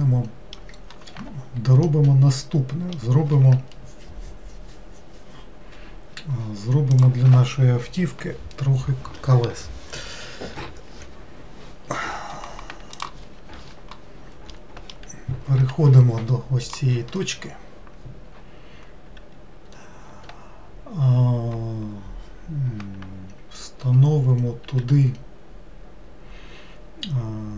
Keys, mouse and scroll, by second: 1.9-5.0 middle drag, 14.6-15.6 middle drag, 15.6 1, 16.7 click, 24.7 shift+s.